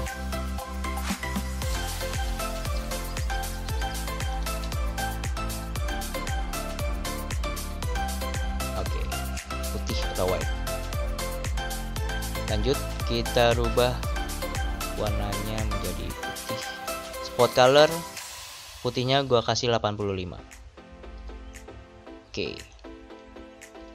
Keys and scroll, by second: 0.3-0.8 typing, 2.1-2.6 typing, 4.1 BackSpace, 4.3 BackSpace, 4.4 BackSpace, 6.5-7.4 typing, 19.1 typing.